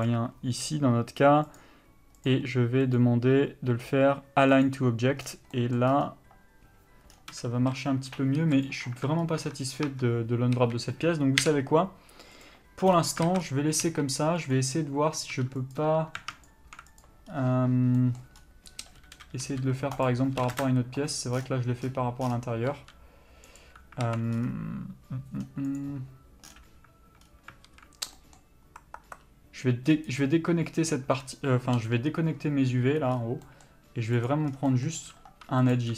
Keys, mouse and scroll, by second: 7.8 a, 8.8 click, 9.7 Tab, 10.7 a, 12.7 u, 13.5 alt+a, 14.0 3, 14.7 click, 15.5 2, 15.9 click, 19.4 s, 20.2 right click, 20.6 s, 22.9 g, 23.8 right click, 24.2 alt+a, 26.0 click, 27.8 alt+a, 32.0 l, 34.5 click.